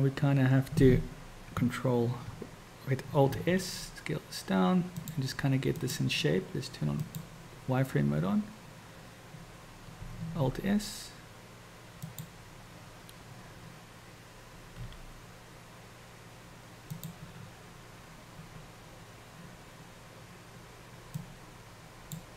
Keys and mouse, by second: 3.4 alt+s, 7.1 click, 10.4 alt+s, 14.8 g, 21.4 click.